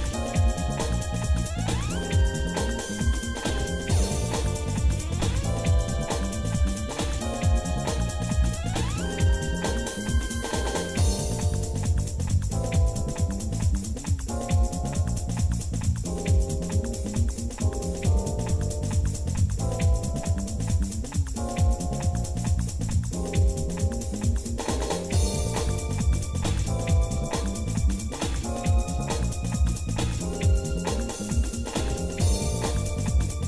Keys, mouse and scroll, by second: 0.3 s, 2.3 g, 5.8 click, 7.0-8.5 drag, 9.2-10.3 drag, 12.0 g, 17.1-18.3 drag, 18.7 click, 19.7 click, 20.3-23.5 drag, 24.9 g, 27.6-28.6 shift+middle drag, 29.3 middle click, 29.8 scroll down 1, 30.2 middle click, 30.8 scroll down 1, 31.1 middle click, 31.9-33.3 shift+middle drag.